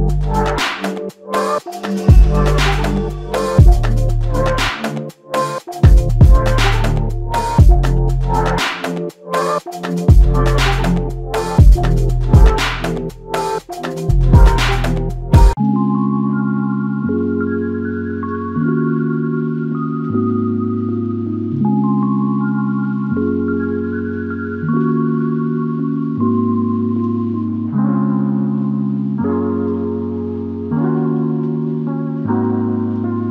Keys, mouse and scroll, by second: 1.8 alt+click, 2.8 shift+click, 4.3 f, 5.4 shift+click, 7.3 alt+click, 9.0 ctrl+alt+click, 10.0 alt+shift+click, 10.2 alt+shift+click, 11.2 alt+click, 15.8 ctrl+click, 17.6 shift+click, 21.4 alt+click, 23.0 ctrl+alt+click, 26.2 shift+click, 27.6 shift+click, 28.7 ctrl+alt+click, 31.3 alt+shift+click, 32.1 alt+click.